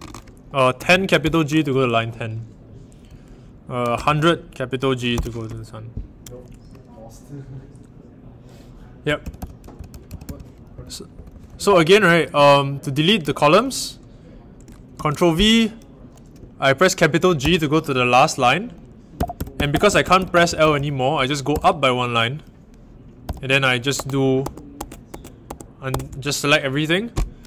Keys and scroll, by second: 0.0-1.2 typing, 3.5-5.1 typing, 8.9-12.1 typing, 14.9 ctrl+v, 17.4 shift+g, 19.1-21.4 typing, 23.2-25.8 typing.